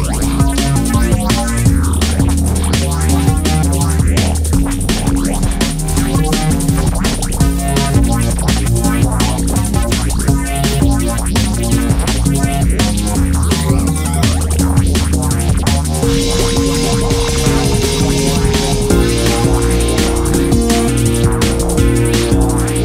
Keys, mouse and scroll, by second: 1.5 e, 1.7 s, 3.1-3.7 scroll down 5, 3.7 click, 3.9 middle click, 4.6 KP_1, 4.9 Tab, 5.4 shift+middle click, 5.6-6.3 scroll up 1, 6.3 ctrl+1, 7.2 Tab, 7.4-8.0 scroll up 1, 8.0 scroll down 3, 8.2 KP_3, 9.0-10.8 drag, 10.8 KP_1, 11.2-12.2 scroll up 1, 12.2 ctrl+r, 14.2 ctrl+r, 16.7-17.2 scroll down 2, 17.2 middle click, 17.5 Tab, 17.8-18.5 middle drag, 18.5 KP_1, 18.9 KP_3, 19.2 Tab, 19.7 click, 20.4 1, 21.2 click.